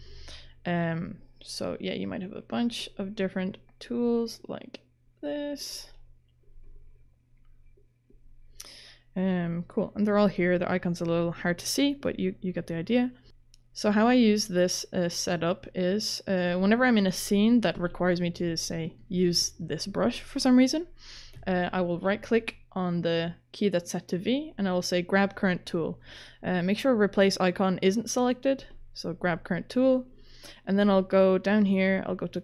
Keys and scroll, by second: 19.1 ctrl+z, 21.4 ctrl+z.